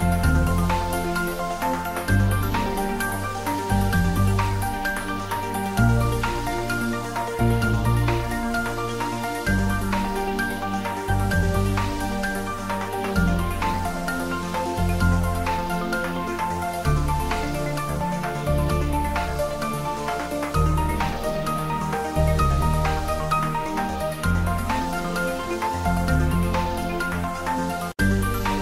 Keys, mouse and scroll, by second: 0.1 click, 0.8 ctrl+b, 3.1-4.2 scroll up 1, 4.4 click, 4.8 ctrl+z, 5.6 Tab, 6.5 ctrl+a, 6.8 click, 7.4 Tab, 7.8 ctrl+b, 10.0-11.1 scroll up 1, 12.4 click, 12.6 Tab, 12.8-13.7 typing, 14.2 click, 14.3 Tab, 14.8 middle click, 15.9 ctrl+middle click, 16.3 shift+middle click, 17.0 Tab, 17.7 shift+z, 18.1 Tab, 18.9 shift+click, 19.5 click, 20.0 shift+click, 20.7 ctrl+b, 24.9 click, 25.0 Tab, 25.2-26.9 middle drag, 26.9 ctrl+middle click, 28.0 ctrl+middle click.